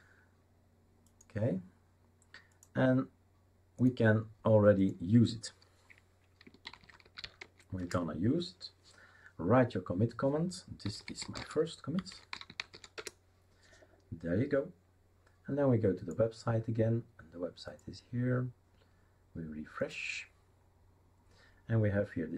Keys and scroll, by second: 6.8-7.7 typing, 7.8 Return, 10.6-14.1 typing.